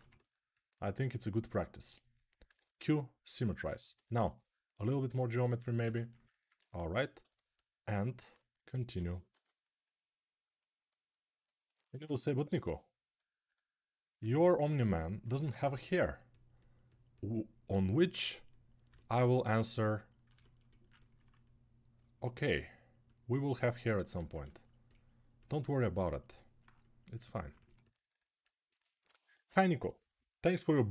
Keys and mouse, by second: 2.2 q, 4.0 shift+r, 5.6 ctrl+r, 8.7 h, 9.1 g, 20.6-26.0 ctrl+alt+drag, 26.0-30.9 alt+right drag.